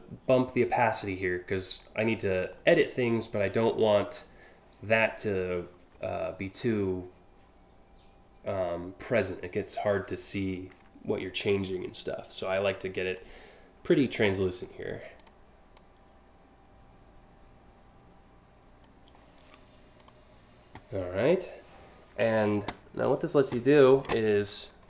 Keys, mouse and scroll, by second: 12.1 click, 13.8 click, 14.8 click, 15.4-18.4 drag, 19.6 click.